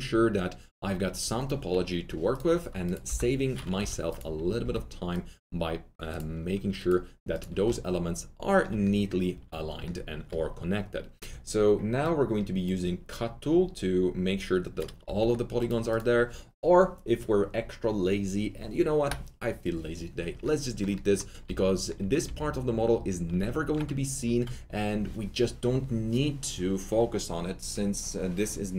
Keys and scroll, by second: 3.0 Delete, 3.8 2, 4.6 s, 7.6 Delete, 7.6 2, 19.0 Delete, 20.3 Delete.